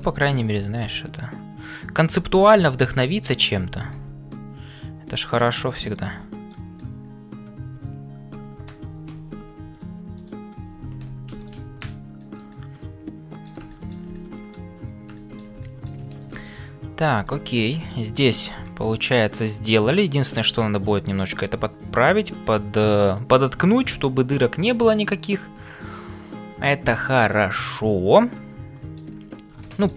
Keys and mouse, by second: 0.0-29.9 typing, 4.4 middle click, 5.9 click, 6.9-8.8 middle drag, 12.5 middle click, 13.7 shift+middle click, 14.1 middle click, 15.1 shift+middle click, 15.6-17.7 middle drag, 16.4 ctrl+s, 18.6-23.1 middle drag, 24.3-28.9 middle drag, 29.7 shift+middle click.